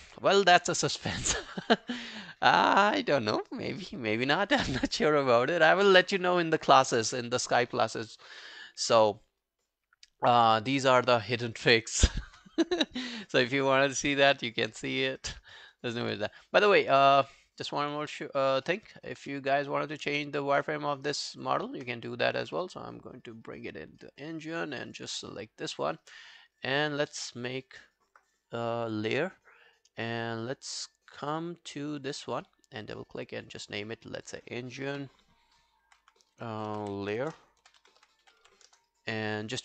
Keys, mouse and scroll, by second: 13.2 alt+middle click, 13.6 alt+scroll down 3, 13.9 alt+middle click, 14.2 alt+scroll up 2, 14.4 alt+click, 14.7 alt+middle click, 15.0 alt+right click, 15.2 alt+click, 15.6 alt+middle click, 15.7 alt+right click, 16.7 alt+middle click, 17.9 scroll down 2, 18.2 alt+click, 18.4 alt+right click, 18.7 alt+middle click, 21.4 shift+click, 22.1 middle click, 23.9 middle click, 24.3 alt+right click, 24.6-24.9 alt+scroll down 2, 24.9 alt+click, 27.7 scroll down 2, 32.1 double click, 35.9-38.9 typing.